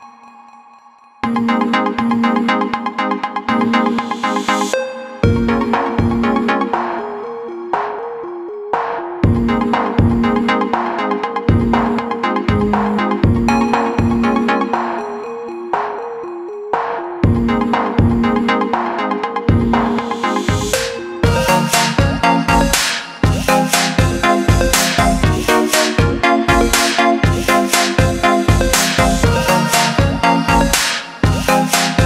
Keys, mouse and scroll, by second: 1.4 click, 22.9 shift+click, 28.8 click, 30.1 alt+click.